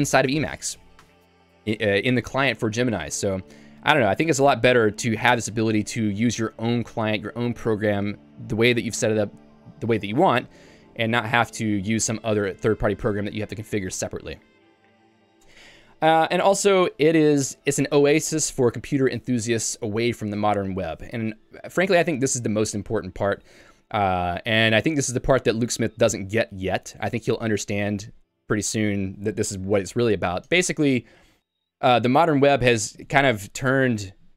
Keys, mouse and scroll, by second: 0.2 ctrl+u, 0.4 ctrl+u, 1.5 Escape, 5.3 Return, 14.7 Escape, 15.8 j.